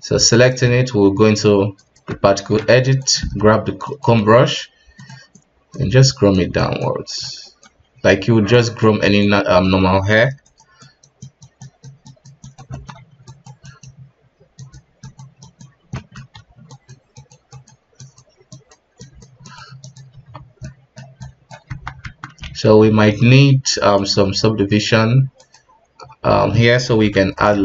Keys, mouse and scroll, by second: 0.3 right click, 0.7 ctrl+Tab, 2.5 f, 3.1 space, 4.4 scroll down 1, 4.6 f, 5.3-7.9 drag, 7.9 KP_3, 8.5-9.5 drag, 9.5 scroll up 2, 10.2 f, 10.8-12.7 drag, 12.7 middle drag, 13.0 KP_1, 13.3-15.9 drag, 15.9-16.3 middle drag, 16.3 KP_3, 16.7-20.1 drag, 20.1 KP_1, 20.6-21.2 middle drag, 21.2-21.7 drag, 21.7 KP_1, 22.0 Tab, 22.4 alt+a, 22.8 Tab, 24.0 click, 25.4 click, 25.9-26.5 scroll up 1, 27.0 b, 27.5 shift+z.